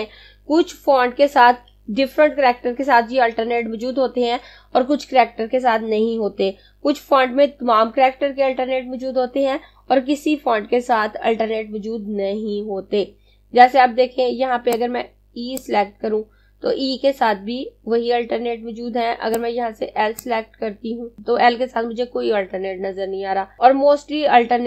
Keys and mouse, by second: 14.2 click, 18.7 click.